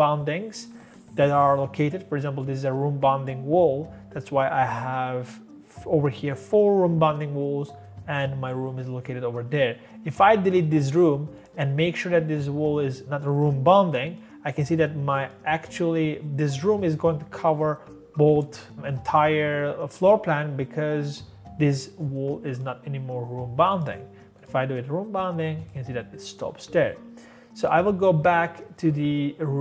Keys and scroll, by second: 10.4-11.1 typing.